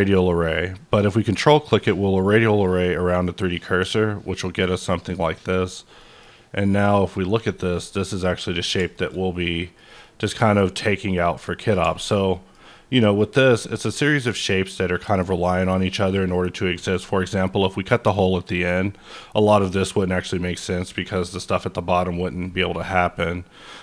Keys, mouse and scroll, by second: 1.6 ctrl+click, 2.4-3.0 scroll down 2, 3.0-4.3 scroll up 3, 4.3-4.9 scroll down 1, 4.9 click, 5.2 middle click, 5.5 scroll down 1, 6.0 middle click, 7.2 click, 7.6-9.0 middle drag, 8.9 scroll up 1, 9.0 scroll down 1, 9.3-11.9 middle drag, 10.3-11.4 middle drag, 12.3 shift+middle click, 14.9 middle click.